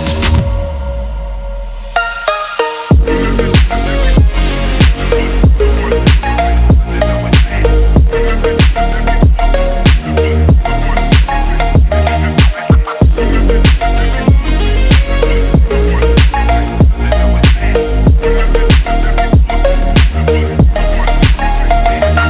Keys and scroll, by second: 14.1 Right, 15.5 ctrl+z, 16.4 ctrl+-, 16.8 ctrl+alt+2, 17.1 BackSpace, 19.8 ctrl+2, 21.1 ctrl+=, 22.1 ctrl+-, 22.1 ctrl+=.